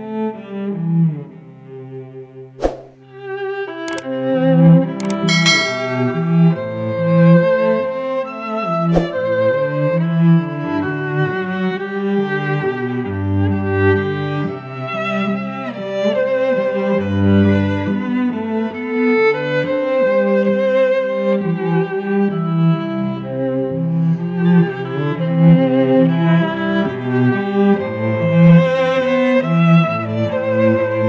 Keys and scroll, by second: 1.6 F9, 3.7 space, 4.7 Tab, 8.7 v, 11.2 ctrl+j, 24.3 ctrl+[, 24.9 shift+Down, 25.1 shift+Right, 26.0 ctrl+t, 27.5 Return, 27.9 shift+Down, 29.8 space.